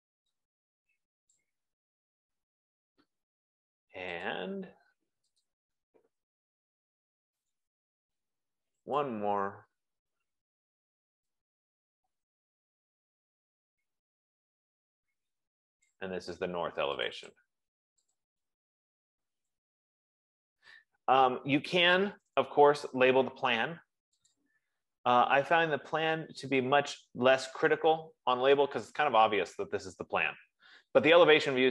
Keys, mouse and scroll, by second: 1.9 click, 1.9-3.1 typing, 4.9 click, 5.9 click, 8.2 click, 16.2 click, 17.6 click, 17.9 click, 18.9 click, 19.6-21.0 typing, 29.5 click.